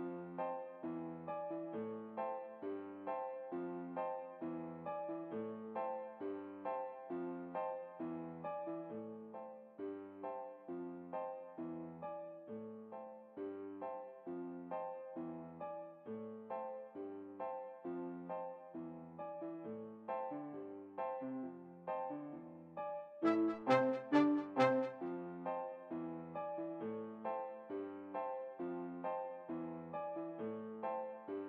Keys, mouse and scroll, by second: 1.6-3.1 right drag, 2.6 g, 6.6-8.1 right drag, 8.0 s, 14.0-15.5 middle drag, 15.4-16.8 right drag, 16.5-17.8 middle drag, 17.5 s, 20.3-22.1 middle drag, 21.7 s, 24.0-26.0 right drag, 24.9 s, 30.5-31.4 right drag, 31.0 s.